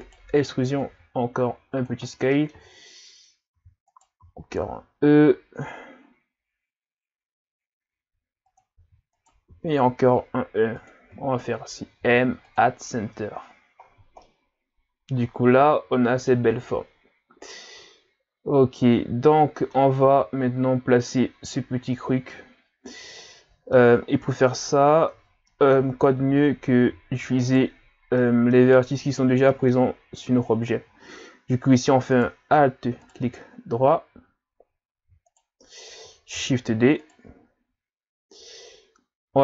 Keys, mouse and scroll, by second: 0.8 s, 2.0-2.3 scroll down 4, 2.3 middle click, 2.7-3.6 scroll up 3, 3.6 e, 4.2 s, 8.8 e, 9.4 s, 12.0 m, 13.0 Tab, 13.3-14.2 scroll down 10, 14.2-17.2 middle drag, 17.3-18.5 scroll up 1, 18.5-19.2 scroll up 1, 19.2-22.3 middle drag, 23.2 middle click, 24.0-25.1 scroll up 5, 25.1 Tab, 25.5 middle click, 25.9-26.6 scroll up 2, 27.4 alt+right click, 28.1 middle click, 28.7-29.5 scroll up 3, 29.5 middle click, 30.0-31.9 scroll up 1, 32.1 right click, 33.0 alt+right click, 35.3 alt+right click, 36.3 shift+d.